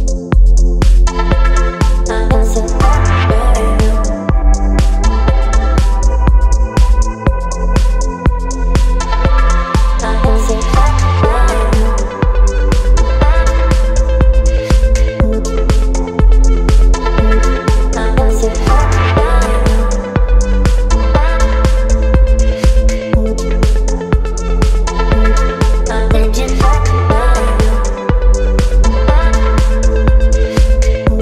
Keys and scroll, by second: 5.1 Delete, 6.5 space, 14.2 Delete, 17.0 ctrl+BackSpace, 18.2 space, 25.0 space, 26.0 space, 27.9 space, 28.9 Delete, 29.5 space, 30.4 Delete, 31.1 Delete.